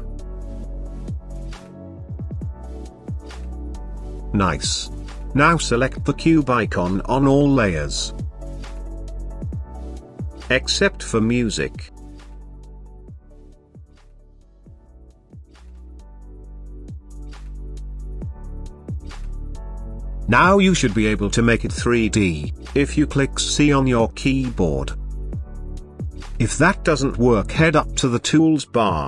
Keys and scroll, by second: 22.6 c.